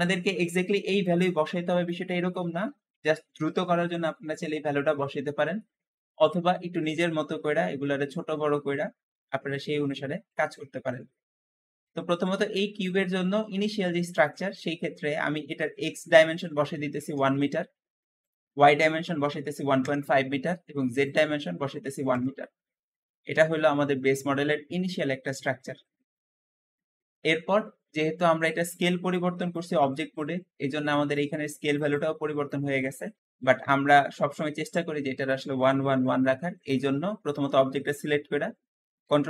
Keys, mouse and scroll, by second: 5.4-8.5 middle drag, 9.7-12.7 scroll up 1, 14.0-17.1 drag, 16.3-16.9 typing, 16.8 Return, 18.1-23.1 drag, 18.9 KP_1, 19.2 ., 19.3 5, 19.7 Return, 21.6 KP_1, 21.7 KP_1, 22.0 Return, 22.1 Return, 23.1 scroll down 2, 23.4-26.5 middle drag, 26.8-29.1 scroll up 2, 29.1 `, 36.7 Escape, 38.9 ctrl+a.